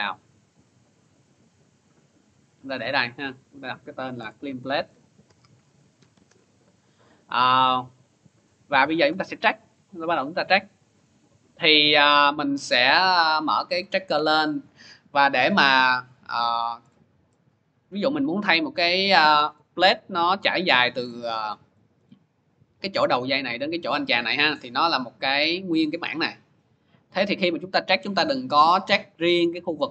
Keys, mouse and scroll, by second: 1.1 click, 2.8 click, 3.4 click, 4.0 Return, 4.2-6.4 typing, 7.4 click, 8.5 scroll, 9.2 scroll, 9.8-11.1 scroll, 12.1 scroll, 12.2 click, 14.3 scroll, 14.5 click, 16.7-17.2 scroll, 19.0 scroll, 19.6 middle click, 19.8 middle click, 19.8-20.7 scroll up 1, 20.9 middle click, 21.8 middle click, 23.4 middle click, 24.1 scroll, 28.3-28.8 scroll, 29.6 scroll.